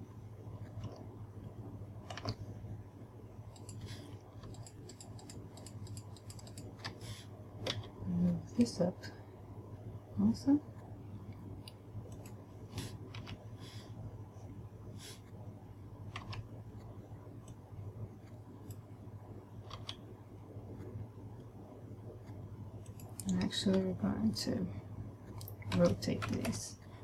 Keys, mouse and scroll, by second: 0.2 click, 2.8 a, 4.0 right click, 4.9 shift+right click, 5.4 shift+right click, 5.7 shift+right click, 5.9 shift+right click, 6.4 shift+right click, 6.7 shift+right click, 6.9 shift+right click, 8.2 g, 12.8 click, 13.8 a, 16.9 b, 20.2 g, 23.5 click, 26.3 r.